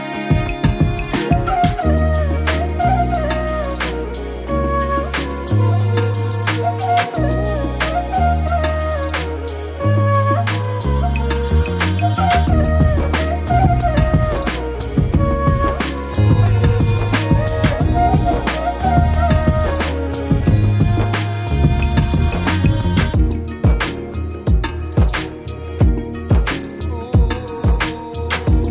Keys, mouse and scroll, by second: 0.6 z, 1.0-3.0 drag, 4.2-5.5 drag, 5.7 middle click, 6.0 scroll down 2, 6.1-6.9 shift+middle drag, 7.2 click, 7.6-8.3 scroll down 8, 7.8-8.2 middle drag, 8.3-9.0 middle drag, 9.5 click, 10.4 middle click, 10.7 drag, 11.4 middle click, 11.7 drag, 12.1 middle click, 12.9 click, 14.6-15.2 drag, 15.2-15.9 middle drag, 20.6-21.9 drag, 22.6 click, 23.3-23.8 scroll down 3, 23.8 click, 24.7 click, 25.7 KP_7, 25.9-27.4 scroll up 11, 26.1 shift+middle click, 26.5 shift+middle click, 27.7 a, 28.3-28.6 drag, 28.6 a.